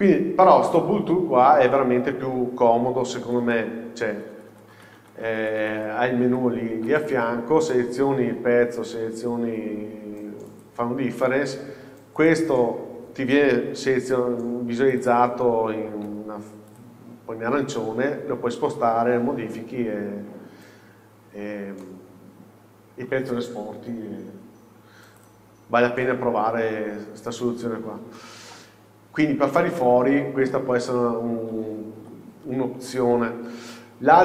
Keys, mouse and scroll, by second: 3.1 ctrl+z, 7.1-7.4 drag, 7.7 click, 8.8 shift+click, 10.6-11.1 drag, 12.3-14.3 drag, 14.3 g, 15.1 click, 15.6-16.1 scroll down 1, 16.1 g, 16.9 click, 17.9-25.3 middle drag, 20.7-21.5 scroll up 2, 21.5-21.9 scroll down 2, 24.3-25.3 scroll down 2, 25.3-26.1 drag, 26.1-27.0 middle drag, 27.0-27.4 scroll up 1, 27.8-28.2 scroll down 1, 28.2 middle click, 31.3-32.1 scroll down 1, 32.1 KP_7, 33.0 scroll up 1, 33.6 scroll down 1.